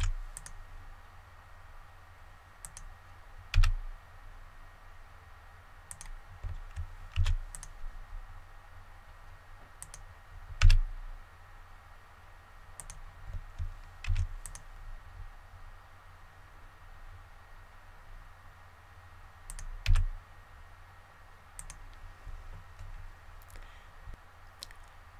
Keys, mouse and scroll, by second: 0.3 click, 5.8 click, 7.1 ctrl+r, 7.4 click, 10.5 click, 12.7 click, 14.0 ctrl+r, 14.4-20.4 drag.